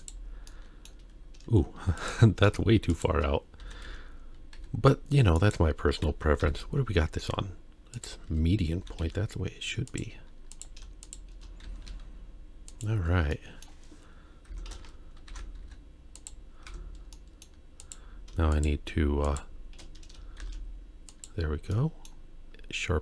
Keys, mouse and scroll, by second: 0.5 middle click, 2.0 click, 2.9 shift+click, 3.6 s, 8.7 s, 10.5 click, 11.0 shift+click, 11.7 s, 13.3 middle click, 14.5 Tab, 15.3 ctrl+3, 15.7 z, 16.7 Tab, 17.2 middle click, 17.8 click, 18.5 shift+click, 19.2 shift+click, 20.4 shift+e, 21.7 middle click, 22.5-23.0 scroll up 2.